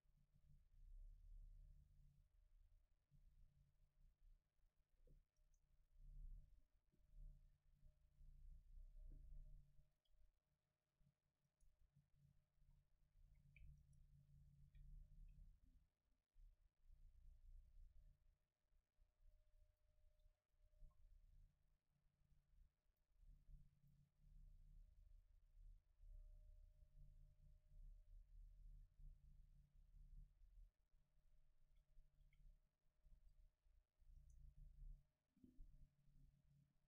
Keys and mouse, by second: 5.6-7.5 right drag, 10.7 Tab, 11.3 Tab, 11.5-13.1 right drag, 12.2 Tab, 12.9 a, 13.1 a, 13.6 a, 19.3-20.4 drag, 20.4 Tab, 20.8 click, 20.9 a, 22.9-25.8 drag, 32.6-35.0 middle drag, 32.6 a, 33.3 ctrl+s, 35.0-36.1 right drag.